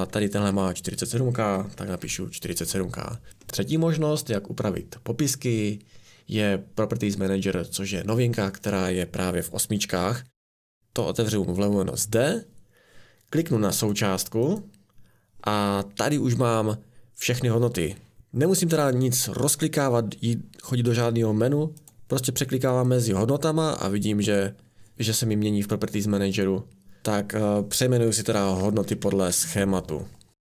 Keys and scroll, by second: 1.1-2.5 typing, 28.6 Right, 28.9 BackSpace, 29.3 3.